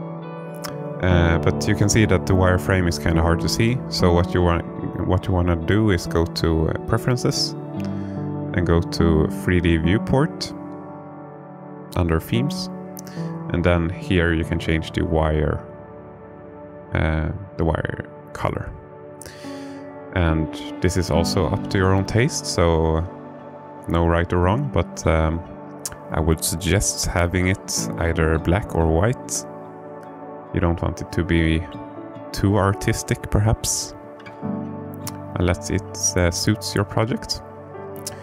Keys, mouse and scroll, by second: 1.7-2.9 drag, 34.6 click, 35.4-35.9 alt+middle drag, 35.9-36.4 alt+drag, 36.4-38.2 alt+middle drag.